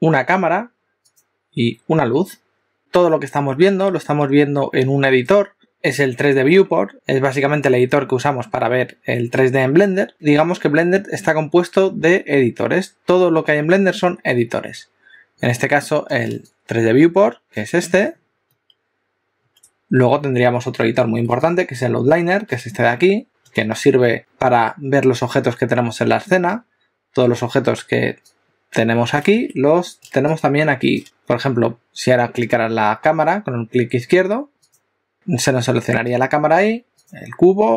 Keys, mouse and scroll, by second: 1.2 click, 2.8 click, 34.6 click, 37.0 click.